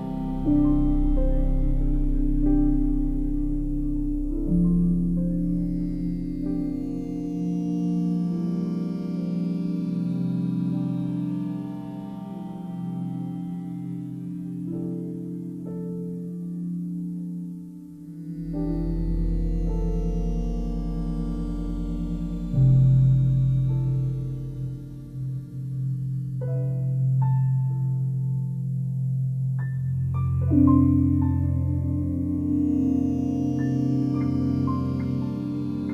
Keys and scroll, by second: 18.6 ctrl+z, 34.2 ctrl+z.